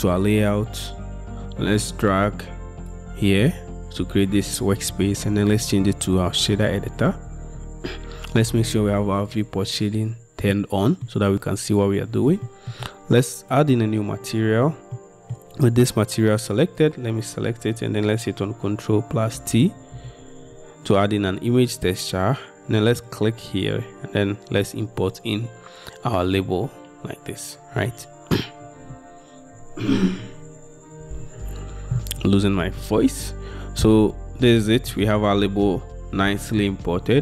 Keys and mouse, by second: 0.0-2.3 drag, 12.6-12.9 shift+drag, 19.6 ctrl+t.